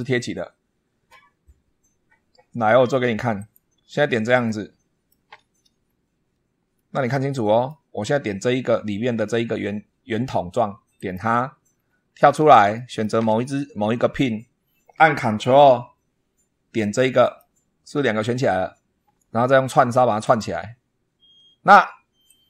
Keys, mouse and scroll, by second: 3.2 click, 4.3 shift+middle click, 5.7 scroll down 2, 6.6-7.7 middle drag, 8.6 scroll up 2, 10.8 click, 11.6-12.1 scroll down 1, 12.6 shift+middle click, 17.1 ctrl+click, 20.1 click, 22.1-22.4 drag.